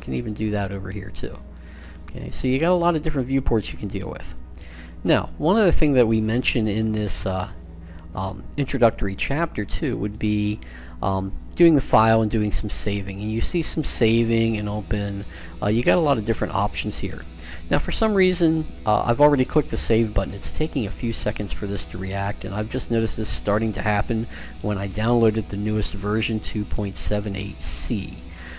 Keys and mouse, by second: 0.0-3.5 drag, 4.3-6.1 drag, 11.3-13.2 drag.